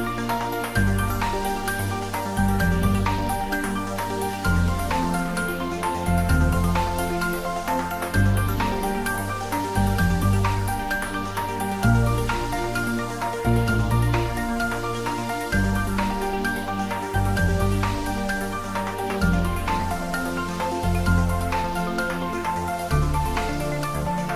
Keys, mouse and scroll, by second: 0.8 click, 1.8 scroll down 1, 9.3-10.2 typing, 13.7 click, 15.5-16.5 typing.